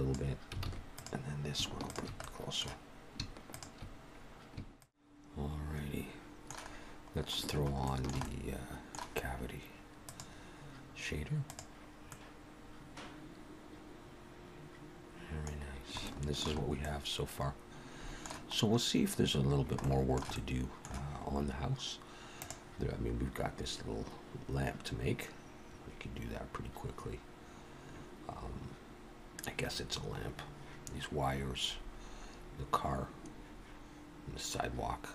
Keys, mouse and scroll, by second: 0.7 alt+a, 0.9 click, 1.8 shift+click, 2.2 middle click, 3.5 shift+click, 5.1 middle click, 5.1 scroll up 3, 6.7-7.2 scroll down 2, 7.8 shift+middle click, 8.1 middle click, 9.9 click, 12.0 middle click, 15.5-15.8 scroll down 2, 16.0 shift+middle click, 16.7 middle click, 18.5-18.9 scroll up 1, 19.7 shift+middle click, 20.2 middle click.